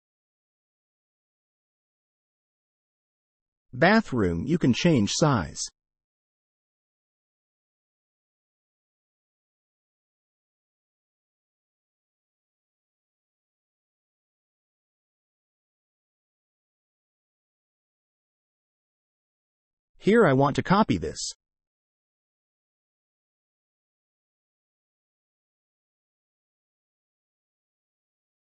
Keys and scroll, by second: 0.0-1.5 typing, 2.7 Escape, 3.0-4.3 typing, 5.2 Escape, 6.8 j, 6.9 space, 11.6 Escape, 13.1 m, 14.9 Escape, 15.4 space, 16.6 space, 17.3 space, 20.8 Escape, 21.3 c, 21.4 space, 22.2 Escape, 23.4 c, 23.5 space, 24.0 Escape, 24.3 c, 24.4 space, 24.9 Escape, 26.7 d, 26.7 space, 27.1 Escape.